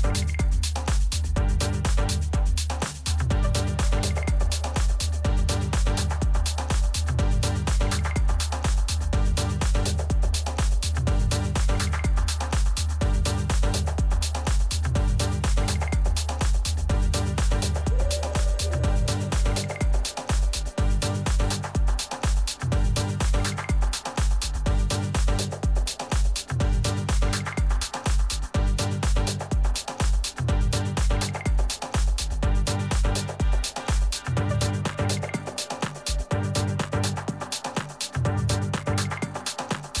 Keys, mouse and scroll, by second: 1.4-7.6 middle drag, 11.1-13.1 middle drag, 12.7 Tab, 13.8-15.7 middle drag, 14.5 a, 15.9 shift+a, 19.7-23.2 middle drag, 23.6-26.6 middle drag, 26.2 s, 29.9-31.8 middle drag, 33.4-35.2 middle drag, 35.2-37.2 drag, 36.8 z, 37.3-40.0 middle drag.